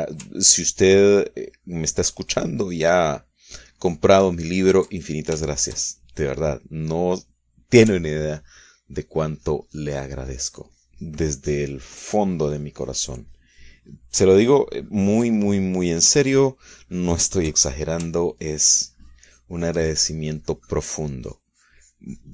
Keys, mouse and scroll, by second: 0.4 shift+middle click, 1.5-6.1 ctrl+shift+drag, 6.2-7.6 ctrl+middle drag, 7.8 ctrl+shift+middle click, 9.4-16.9 ctrl+drag, 16.9 middle click, 17.4-19.2 ctrl+drag, 19.5-22.2 ctrl+drag.